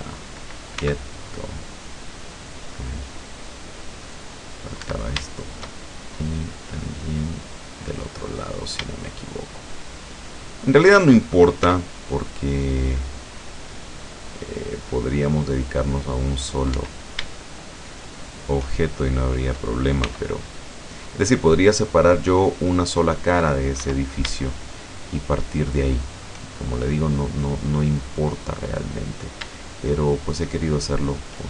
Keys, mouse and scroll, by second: 0.8 c, 1.4-5.1 drag, 4.9 Escape, 5.4 shift+right click, 5.8-6.2 shift+scroll down 1, 6.5-8.2 middle drag, 8.4-8.8 scroll up 1, 9.0 shift+middle click, 9.8 shift+middle click, 10.6 shift+middle click, 11.7 c, 12.7-16.8 drag, 16.8 Escape, 18.2 shift+right click, 20.0 c, 20.7-21.2 scroll up 2, 21.8-23.6 middle drag, 23.8 Escape, 24.6 shift+right click, 25.2 shift+right click, 26.5 shift+scroll up 1, 26.6 shift+middle click, 27.2 scroll up 2, 27.5 scroll down 2, 28.0 middle click, 28.8 scroll down 2, 30.4 shift+right click.